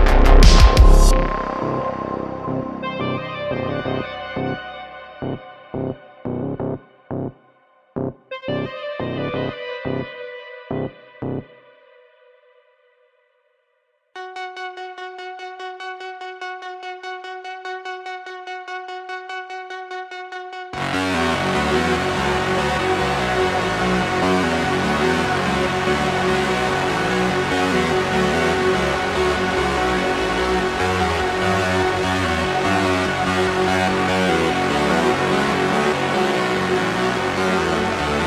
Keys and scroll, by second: 1.3 s, 6.9 Tab, 9.0 g, 12.1 g, 13.3 g, 14.7 super+z, 15.8 g, 19.2 g, 22.2 Tab, 22.8 s, 23.7 alt+shift+c, 24.6 s, 25.6 Tab, 27.3 Tab, 28.1 x, 29.8 x, 31.5 ., 32.9 g, 35.4 g.